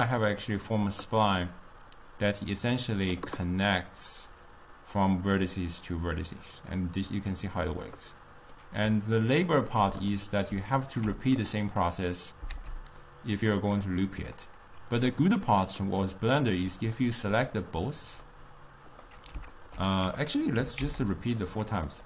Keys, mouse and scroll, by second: 2.0-3.8 drag, 3.8-9.2 middle drag, 9.2-10.2 ctrl+right drag, 10.2-11.5 middle drag, 11.5 drag, 12.6 shift+d, 13.9-15.0 middle drag, 15.0-16.1 drag, 16.1-16.9 middle drag, 16.9 click, 17.3-18.3 drag, 18.3-20.3 middle drag, 20.3 click, 20.7 g, 21.7 click.